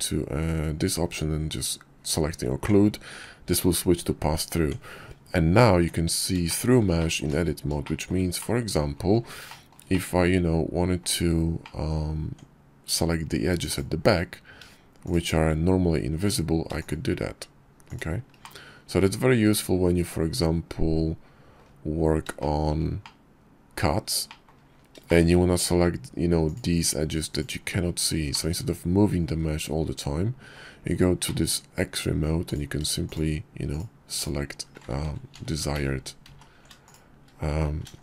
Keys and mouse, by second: 2.5 Tab, 4.4 Tab, 5.7 shift+click, 6.2 middle click, 7.0 middle click, 7.6 middle click, 8.7 shift+click, 9.1 click, 9.3 middle click, 9.5 click, 9.6 middle click, 9.7 click, 10.0 middle click, 10.8 click, 11.4 Tab, 12.9 click, 14.3 shift+click, 16.0 shift+click, 17.6 middle click, 18.5 middle click, 18.8 middle click, 20.4 middle click, 21.6 shift+middle click, 22.2 middle click, 23.5 click, 27.5 click, 27.9 click, 28.6 click, 29.3 middle click, 30.5 middle click, 30.5 click, 30.6 middle click, 31.7 middle click, 32.3 shift+middle click, 35.5 ctrl+z, 37.0 ctrl+b.